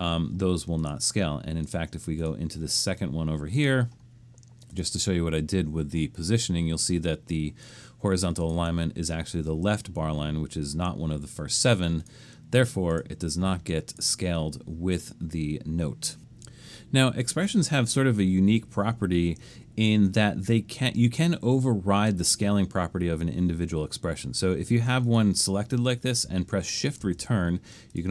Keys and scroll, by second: 27.0 shift+Return.